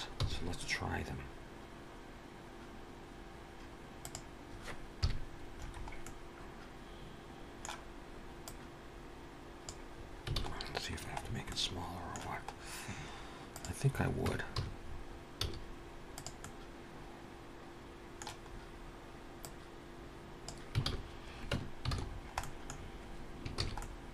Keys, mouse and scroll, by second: 0.4 g, 4.8 KP_Decimal, 5.4-6.1 scroll down 5, 5.8 middle click, 8.2 click, 9.7-10.1 scroll down 3, 10.1 alt+a, 10.5-11.0 scroll down 1, 11.0-11.4 scroll down 5, 11.3 middle click, 12.4 scroll down 2, 13.4 click, 13.7-14.1 scroll up 3, 14.0 Tab, 14.4 a, 14.7-15.2 scroll up 3, 15.2 s, 16.2 middle click, 18.3-18.9 scroll up 2, 18.9 scroll up 1, 19.5 click, 20.7 alt+a, 21.3 Tab, 21.7 alt+a, 21.9-23.0 scroll down 7, 22.2 middle click, 23.4 ctrl+s, 23.6 middle click.